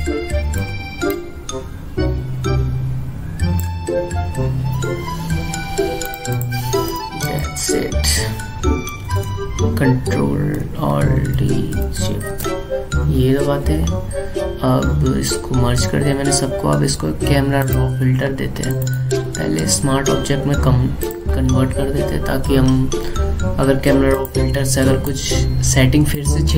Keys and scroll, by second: 0.9 Return, 12.8 ctrl+alt+shift+e.